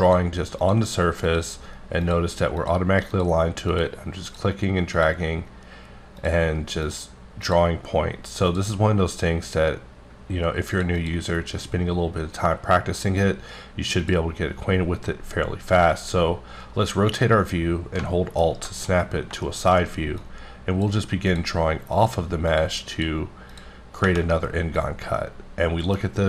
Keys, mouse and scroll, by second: 0.7 click, 1.3 click, 2.6 click, 4.2 click, 4.9 click, 6.2 click, 6.8 click, 7.4 click, 8.5 click, 10.7 click, 11.0 double click, 14.0 click, 15.3-15.6 scroll down 1, 15.8 middle click, 18.8 scroll up 1, 19.4 middle click, 20.2 click, 21.3 click, 21.9 click, 22.5 click, 22.9 click, 25.1 middle click.